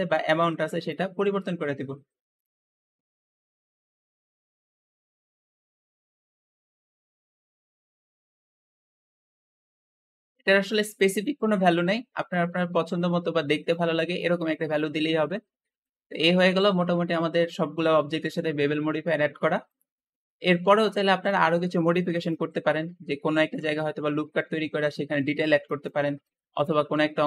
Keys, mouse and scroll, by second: 0.4 shift+middle click, 1.0-1.9 scroll up 1, 2.2 click, 2.8 shift+click, 3.9 scroll down 2, 4.0 shift+middle click, 4.2-5.0 scroll up 4, 4.3 shift+click, 4.4 shift+middle click, 5.0-5.8 scroll down 1, 5.8 shift+click, 6.4 scroll down 2, 6.5 shift+middle click, 7.0-7.3 scroll up 3, 7.3 shift+middle click, 7.7 shift+click, 7.9-8.9 typing, 8.5 ctrl+a, 9.0 Return, 9.3-9.9 scroll down 5, 9.7 click, 9.9-14.9 middle drag, 14.9-15.5 scroll down 2, 15.5-19.0 shift+middle drag, 19.4-21.6 shift+middle drag, 21.6 scroll up 2, 22.0 shift+middle click, 22.5 Tab, 23.7-25.8 shift+middle drag, 25.8 Tab, 26.0 Tab, 26.2 click, 26.3 Tab, 26.4 Tab, 26.8 alt+z, 27.2 s.